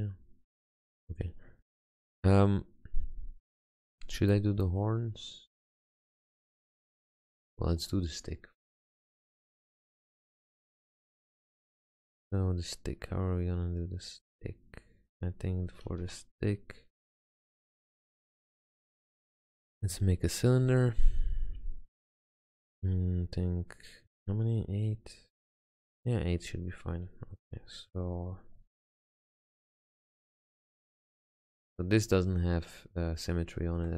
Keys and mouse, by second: 6.7-7.3 middle drag, 7.4-9.8 middle drag, 16.0 shift+a, 19.6-20.8 middle drag, 20.8 F6, 24.6-26.5 middle drag, 27.7 Tab, 29.9 s, 31.6 g, 32.6 middle click, 33.4 middle click.